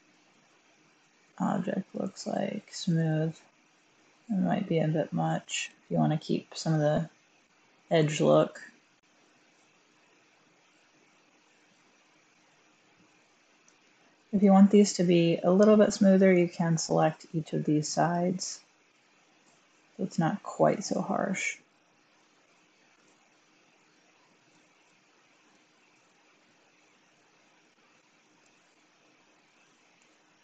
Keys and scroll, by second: 5.7 1, 9.1 Tab, 29.9 1.